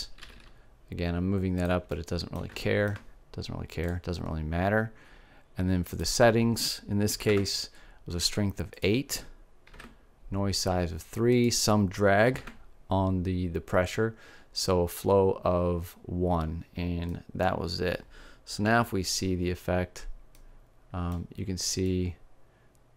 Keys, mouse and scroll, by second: 0.8 g, 2.2-6.3 drag, 6.3 middle click, 6.5-8.4 drag, 9.4-11.2 drag, 11.9-13.7 drag, 17.7-19.3 middle drag, 19.3 alt+a, 19.7-21.1 middle drag.